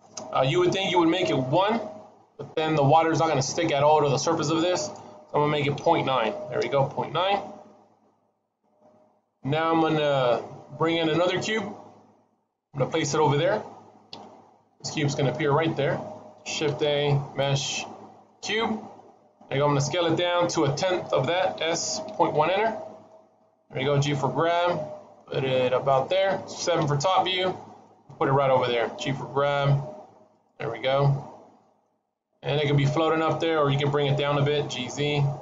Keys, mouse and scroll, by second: 4.6 click, 14.0 KP_1, 16.5 shift+a, 21.4 s, 24.0 g, 26.7 KP_7, 28.9 g, 30.6 middle click, 32.0 shift+middle click, 32.7-33.6 scroll up 2, 33.6 scroll up 1, 33.8 g.